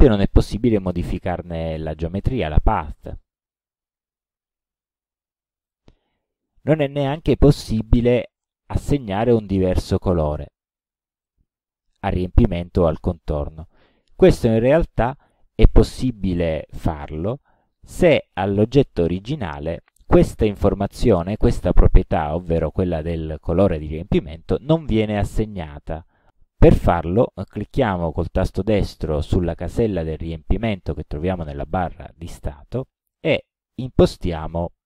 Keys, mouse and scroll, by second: 0.2 click, 5.7 click, 9.0 click, 10.2 click, 11.3 click, 19.3 click, 31.6 right click.